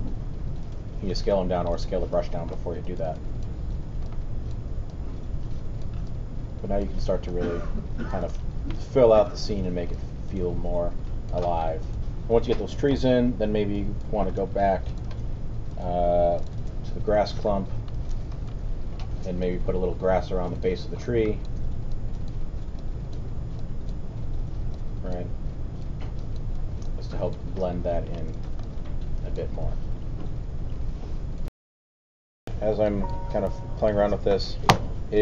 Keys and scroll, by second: 0.8 w, 1.7 alt+w, 31.6 alt+super+..